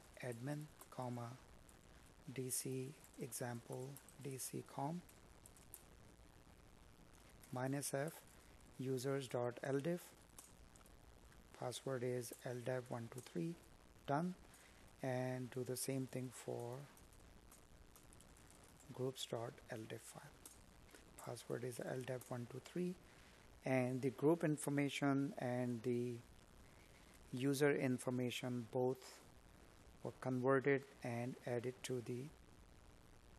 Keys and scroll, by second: 4.5 Up, 32.4 space.